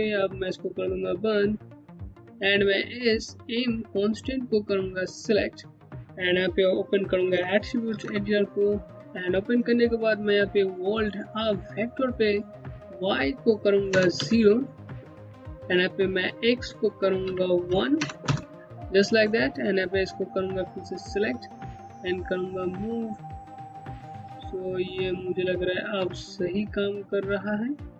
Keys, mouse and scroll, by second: 0.0 KP_Enter, 3.9 click, 6.8 ctrl+Num_Lock, 7.5 ctrl+a, 8.8-10.1 scroll down 1, 12.1 click, 13.5 KP_0, 13.8 KP_Enter, 15.8 click, 16.8 KP_1, 17.3 KP_Decimal, 17.6 KP_0, 17.8 KP_Enter, 19.8 click, 23.6 z, 23.8 click, 25.3 alt+click.